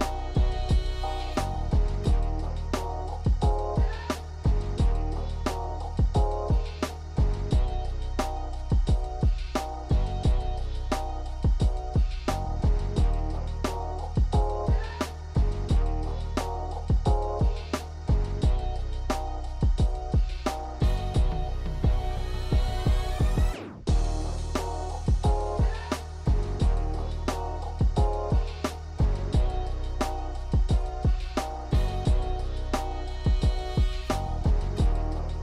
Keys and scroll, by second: 0.6 ctrl+Delete, 1.8 KP_1, 3.0 shift+z, 3.9 Tab, 10.2 KP_8, 31.9 KP_1.